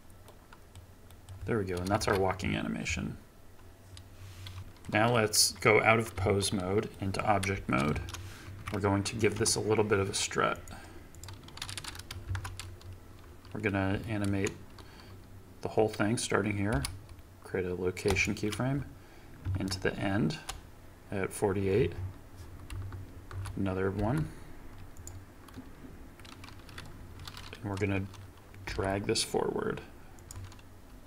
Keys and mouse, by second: 2.0 ctrl+Tab, 2.3-4.6 drag, 6.4 ctrl+Tab, 6.9 click, 7.5 space, 7.9 shift+Left, 8.6 KP_3, 9.3 KP_9, 11.1 click, 12.3 shift+Left, 16.7 i, 19.4 shift+Right, 22.7 i, 24.0 i, 28.6 g.